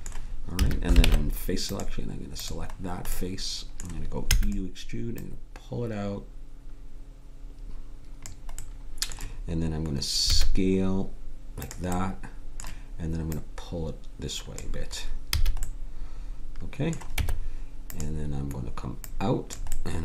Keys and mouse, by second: 0.5 a, 1.0 ctrl+Tab, 2.8 click, 4.3 e, 10.3 s, 13.5-15.2 right drag, 15.3 a, 17.1 Tab, 19.0 click.